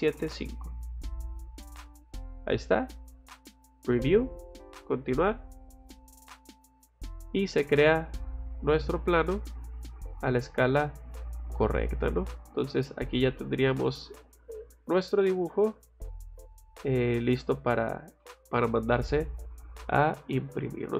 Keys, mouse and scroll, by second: 1.8 click, 3.3 click, 3.7 click, 4.6 click, 5.0 click, 10.2 middle click, 10.9 middle click, 11.7 middle click, 12.3 middle click, 13.6 middle click, 14.1 middle click, 14.9 middle click, 15.5 middle click, 16.2 middle click, 17.8 middle click, 18.2 middle click, 19.1 middle click, 20.2 middle click.